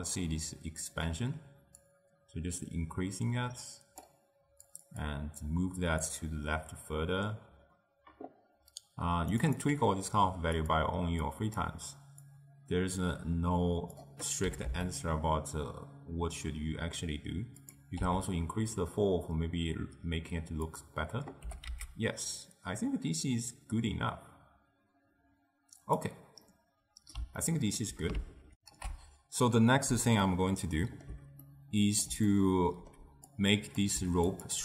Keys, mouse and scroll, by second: 1.0 click, 1.9-4.9 drag, 5.1-9.2 drag, 9.5-10.8 drag, 11.4 click, 12.4-14.6 drag, 14.6 g, 18.1 s, 21.5 g, 26.6-28.6 middle drag, 28.6 ctrl+alt+shift+w, 30.3 ctrl+alt+shift+q, 30.7-33.4 middle drag, 33.4 click, 34.0 g.